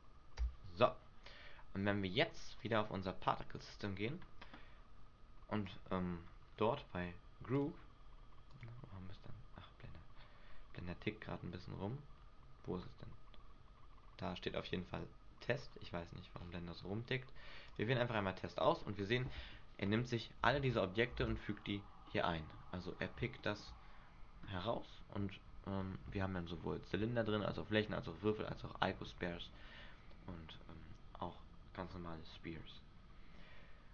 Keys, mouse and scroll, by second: 2.8 click, 3.8 right click, 5.8 click, 6.4-7.3 scroll down 2, 7.3 scroll down 5, 7.7 click, 19.2 scroll up 2, 20.7 alt+a, 20.7 scroll up 1, 21.4 alt+a, 21.7-22.5 scroll down 4, 22.3 middle click, 22.8-23.3 scroll up 6, 23.8 shift+middle click, 23.8-24.8 shift+scroll up 3, 24.8 middle click.